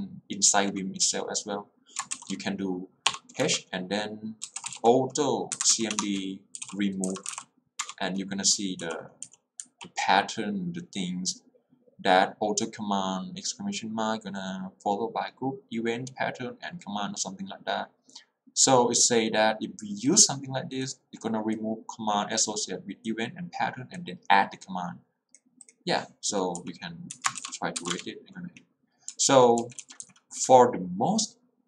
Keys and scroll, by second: 3.2-8.9 typing, 26.7 k, 27.3 Escape, 27.8 q, 28.0 Return, 29.3 k.